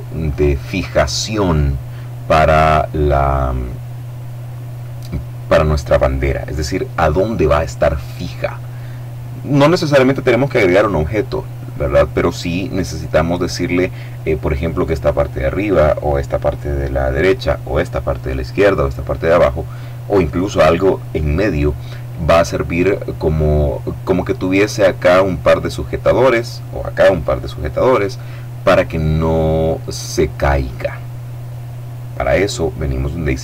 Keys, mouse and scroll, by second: 33.3 click.